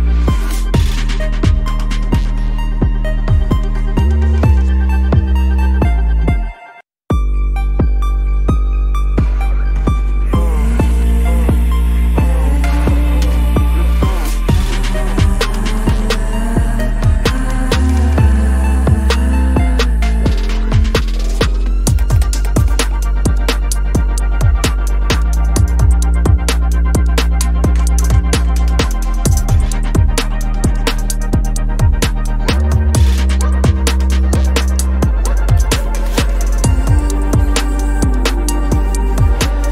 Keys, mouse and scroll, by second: 0.3 space, 3.2 ctrl+`, 3.6 space, 5.7 typing, 6.1 double click, 6.7 ctrl+-, 6.8 ctrl+space, 7.4 alt+click, 7.5 ctrl+-, 7.6 space, 7.9 double click, 8.1 space, 9.8 space, 10.4 double click, 11.5 space, 11.8 ctrl+-, 11.9 double click, 12.0 space, 12.2 double click, 12.5 space, 12.9 right click, 16.3 ctrl+-, 16.5 ctrl+-, 16.7 ctrl+-, 18.1 alt+click, 19.8 alt+click, 23.3-23.9 typing, 25.4 ctrl+-, 25.6 ctrl+-, 26.4 ctrl+-, 26.6 ctrl+-, 26.7 ctrl+-, 27.0 space, 27.8 ctrl+´, 28.0 ctrl+´, 28.3 space, 28.9 space, 29.0 ctrl+´, 29.3 space, 30.5 space, 32.2 double click, 37.6 double click.